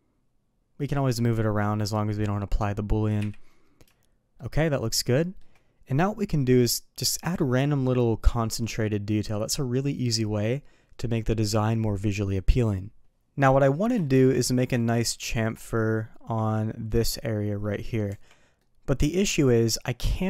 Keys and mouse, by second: 3.1 KP_3, 4.3-5.3 shift+middle drag, 13.4-13.8 middle drag, 14.0 shift+middle drag, 14.7 shift+middle drag, 15.5 click, 18.0 Tab, 18.6-19.0 middle drag.